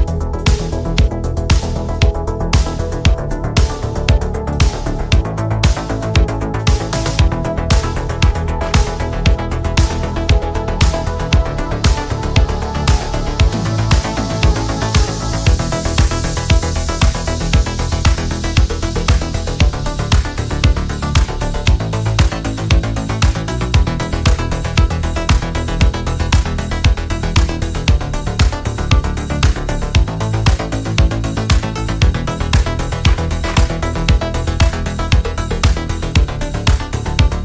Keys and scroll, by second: 3.9 ctrl+z, 6.4 ctrl+z, 32.0 ctrl+z.